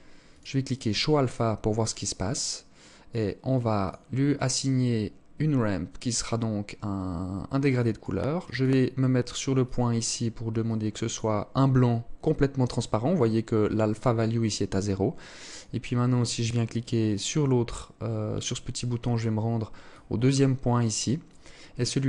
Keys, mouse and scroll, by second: 2.3 click, 3.0 click, 6.9 click, 7.5 click, 11.8 click, 16.3 click, 19.1 click, 20.4 click, 21.6 click.